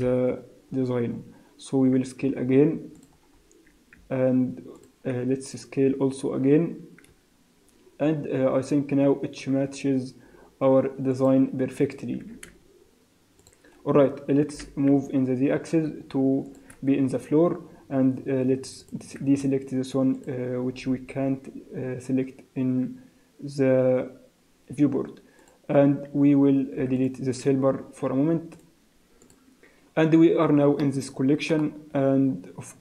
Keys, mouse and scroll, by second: 0.1 KP_Decimal, 0.7-1.3 scroll up 9, 2.2 s, 3.3-4.0 scroll up 1, 4.0 scroll up 1, 4.0 z, 5.3 scroll up 2, 5.8 s, 12.2 s, 14.5 g, 18.8 click, 20.2 click, 25.4 click, 26.8 x, 28.6 click, 29.3 click, 30.8 middle click, 32.0 scroll down 1.